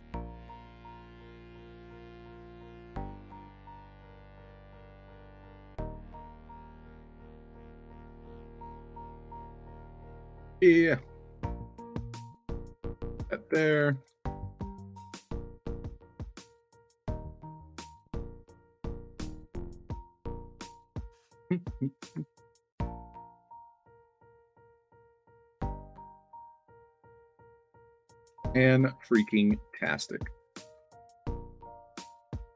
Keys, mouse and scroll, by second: 0.0 click, 1.1 shift+click, 1.8 click, 2.6 shift+click, 2.9-3.8 typing, 4.1 ctrl+z, 4.7 click, 5.4 click, 6.1 shift+click, 6.7 ctrl+d, 7.3-8.2 typing, 7.4-9.7 drag, 9.7-11.5 typing, 10.0-10.4 alt+drag, 10.6 middle click, 11.5-12.9 drag, 13.2 alt+click, 13.6-14.3 typing, 14.0-14.9 alt+drag, 15.3 ctrl+d, 16.1-17.3 drag, 17.4-19.6 typing, 17.7-18.1 alt+drag, 18.3 middle click, 19.0 alt+click, 20.4-21.9 drag, 22.2-23.4 alt+drag, 23.4-24.4 typing, 24.8 alt+click, 25.5-26.8 drag, 27.1-27.8 alt+drag, 27.9 middle click, 28.4 space, 28.6 s, 29.4 click, 30.7 alt+click, 31.6 click.